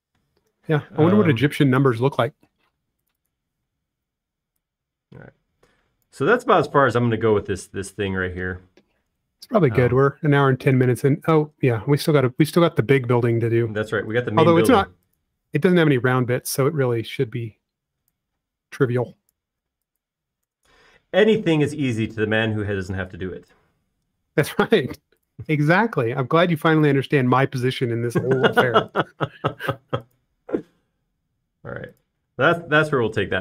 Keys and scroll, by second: 3.6-4.8 typing, 7.5 space, 12.0 l, 12.9 space, 14.1 l, 15.6 typing, 16.7 p, 19.6 e, 20.9-21.6 typing, 23.6 e, 25.4-26.2 typing, 27.2 space, 30.9 m.